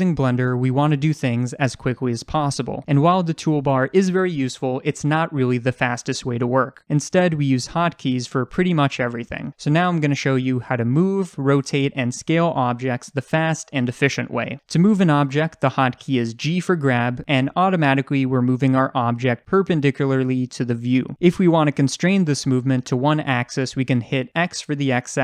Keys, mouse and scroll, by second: 16.4 g.